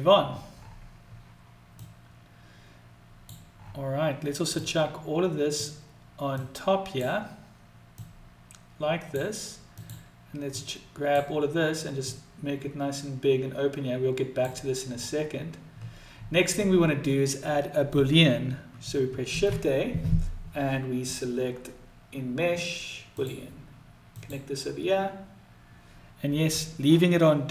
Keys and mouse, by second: 1.5-2.9 drag, 4.2-5.3 drag, 6.1-6.6 drag, 7.6-8.8 drag, 9.5 drag, 10.2-10.9 drag, 11.6-14.1 drag.